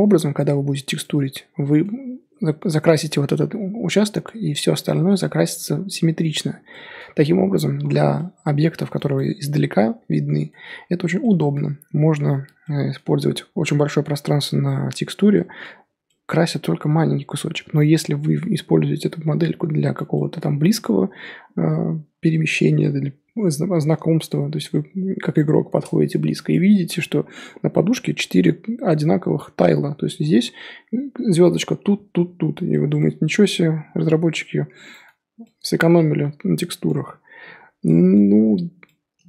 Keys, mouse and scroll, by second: 7.8-8.1 scroll down 10, 8.1-10.6 middle drag, 10.6-11.0 scroll up 3, 11.2-12.9 middle drag, 12.9-13.7 scroll up 6, 15.3 middle click, 15.8 scroll up 3, 16.1-17.5 middle drag, 17.5 scroll down 4, 17.6 scroll up 1, 17.7-20.9 middle drag, 20.9 scroll up 2, 22.1 scroll down 2, 22.3-24.0 middle drag, 24.0 scroll up 2, 24.2-26.4 middle drag, 26.4-27.8 scroll up 5, 26.5-26.8 middle drag, 27.8-29.9 scroll up 1, 32.7-33.1 middle drag, 33.1 scroll down 5, 33.4-35.1 middle drag, 35.1 scroll up 4, 35.4-37.0 middle drag, 37.0-37.4 scroll down 3, 37.4-37.8 scroll up 4, 37.8-39.2 middle drag.